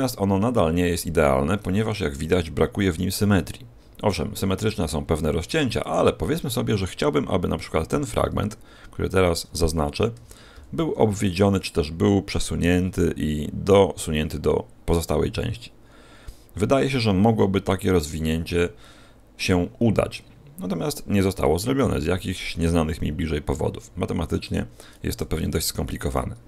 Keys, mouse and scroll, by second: 6.1-8.0 scroll up 5, 10.5 b, 22.5-23.8 scroll down 2, 24.4-24.9 scroll down 2, 24.4 a, 24.9 middle click.